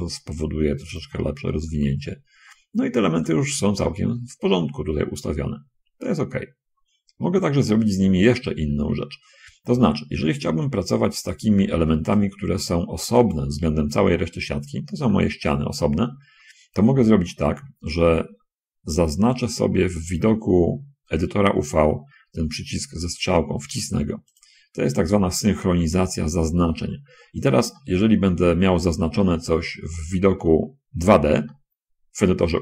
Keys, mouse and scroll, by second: 0.1 click, 0.6-1.9 middle drag, 3.6 middle click, 4.5 middle click, 5.2 scroll up 2, 7.6-8.1 scroll up 2, 8.5-9.6 shift+middle drag, 9.9 shift+scroll up 2, 10.1 a, 11.6 b, 12.4-13.8 drag, 16.3 middle click, 16.3-17.3 scroll up 2, 17.1 middle click, 20.1-21.8 drag, 24.6 click, 27.1 middle click, 28.1 shift+click, 29.0 shift+click, 29.5 click, 30.2 click, 31.8 shift+click.